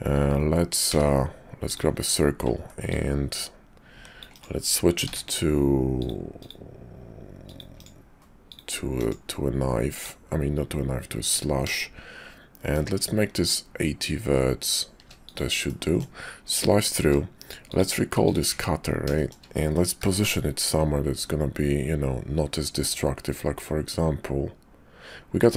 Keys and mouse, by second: 0.9 d, 2.8-4.5 drag, 5.0 d, 8.4 click, 10.0-15.4 drag, 15.7 middle click, 16.9 q, 18.5 `, 19.2 shift+click, 20.0 g.